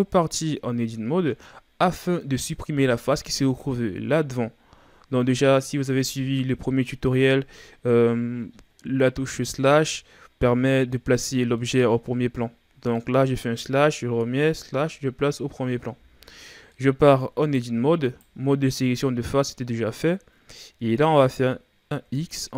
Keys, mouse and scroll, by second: 0.0 KP_Divide, 1.1-1.4 scroll down 2, 1.4-4.5 middle drag, 5.4 KP_Divide, 9.5 KP_Divide, 11.2-11.6 scroll down 2, 11.6-13.6 middle drag, 13.6 KP_Divide, 14.7 KP_Divide, 16.7 middle click, 17.4 Tab, 18.1 right click, 22.0 x.